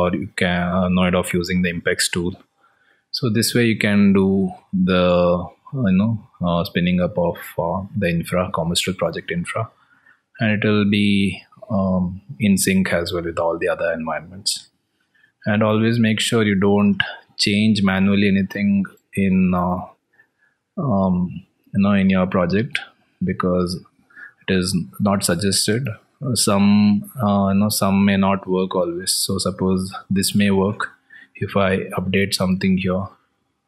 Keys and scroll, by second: 17.7 alt+Tab.